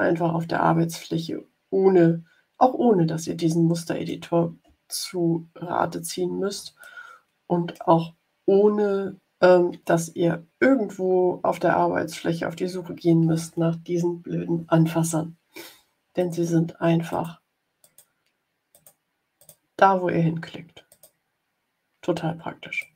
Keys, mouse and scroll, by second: 3.3 middle click, 4.9-5.5 ctrl+scroll up 3, 6.7-7.8 drag, 10.8-12.3 drag, 16.1 click, 17.0 click, 17.7 click, 18.6 click, 19.3 click, 20.8 click, 22.7 click.